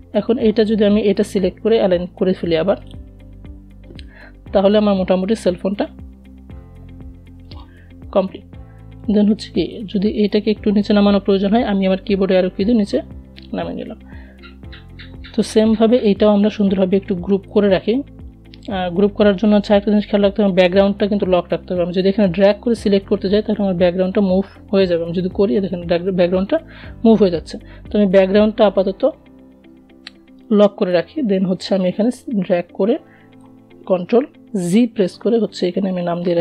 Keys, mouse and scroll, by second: 4.1 click, 9.3 Down, 14.9 click, 23.5-25.1 drag, 25.1 ctrl+z, 28.8-32.8 drag, 32.8 ctrl+g, 34.3 click, 34.8-36.4 typing.